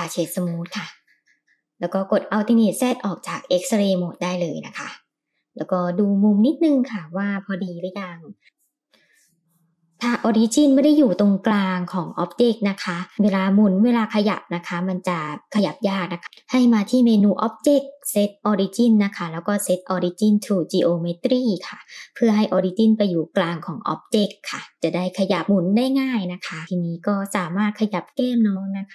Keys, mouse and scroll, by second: 1.1 alt+z, 2.6-3.3 middle drag, 3.3-3.8 scroll down 2, 4.0-5.3 middle drag, 6.5 KP_7, 7.9 r, 13.1 r, 16.1-18.3 drag, 19.7 r, 21.9 g, 23.6-25.1 middle drag, 25.6-27.1 middle drag, 27.3 r, 28.1 g.